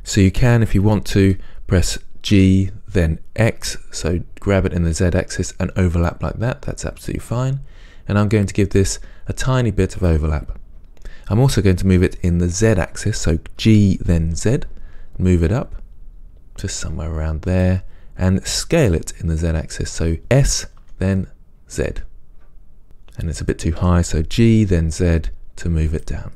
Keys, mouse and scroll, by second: 2.7 g, 10.3 click, 13.9 g, 17.8 click, 19.2 s, 24.0 g.